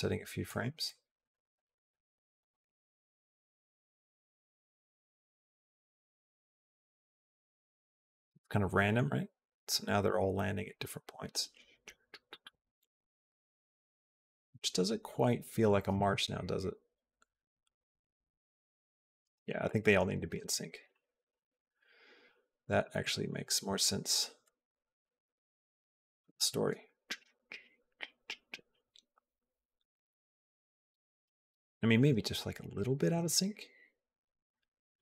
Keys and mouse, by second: 0.6 middle click, 1.4 middle click, 2.2 click, 2.5 g, 4.0 middle click, 4.8 click, 5.1 g, 6.4 middle click, 7.2 click, 7.4 g, 8.1-9.3 middle drag, 10.0-15.5 drag, 15.8 space, 19.8 space, 20.7 ctrl+z, 20.8 ctrl+z, 21.0 ctrl+z, 21.1 ctrl+z, 21.3 ctrl+z, 21.4 ctrl+z, 21.6 ctrl+z, 21.8 ctrl+z, 22.5 middle click, 23.5 ctrl+z, 24.3 middle click, 25.0 ctrl+z, 25.5 ctrl+z, 26.2 space, 31.1 space, 33.0 g.